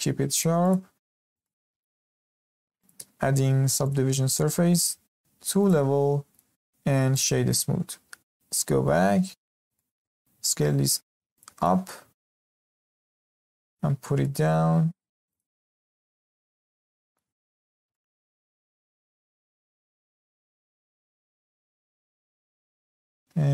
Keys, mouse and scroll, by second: 1.1-1.4 scroll down 2, 1.4-2.2 shift+middle drag, 2.2 Tab, 2.8-6.3 drag, 6.3 right click, 8.5 alt+h, 9.4-9.7 scroll up 2, 9.7-10.2 shift+middle drag, 10.2 s, 11.3 click, 11.5 click, 12.0 s, 14.0 g, 15.6 scroll down 1, 15.7-17.3 middle drag, 17.3 scroll up 1, 17.6-19.1 shift+middle drag, 19.1-19.4 scroll up 1, 19.4-21.4 middle drag, 21.4 z, 21.7 scroll up 2, 21.9-22.4 shift+middle drag, 22.4 s.